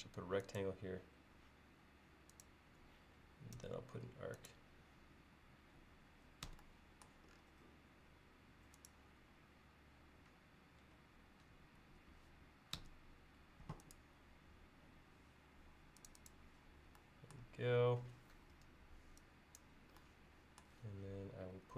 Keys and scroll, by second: 3.6 a, 6.5 Escape, 12.8 Escape, 18.6 e.